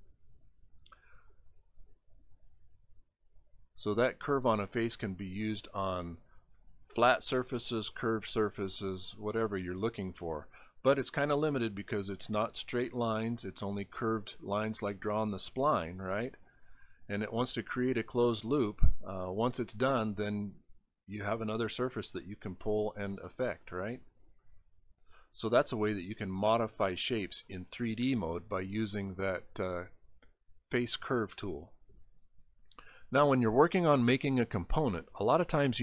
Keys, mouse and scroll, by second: 3.7 click, 5.0 click, 6.0 click, 6.5 click, 7.0 click, 7.6 click, 8.1 click, 8.7 click, 9.2 click, 10.5 click, 11.2 click, 12.6 click, 14.2 click, 15.1 click, 16.3 click, 19.7 click, 21.3-22.3 drag, 23.3 middle click, 24.4 middle click, 25.1 middle click, 25.6 middle click.